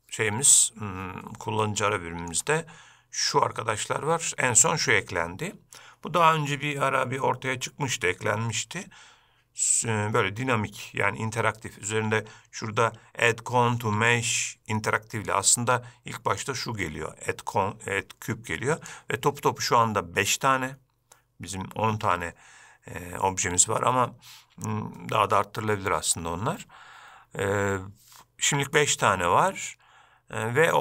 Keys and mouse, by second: 1.7-2.4 shift+middle drag, 15.5-16.6 drag, 19.0-30.8 drag.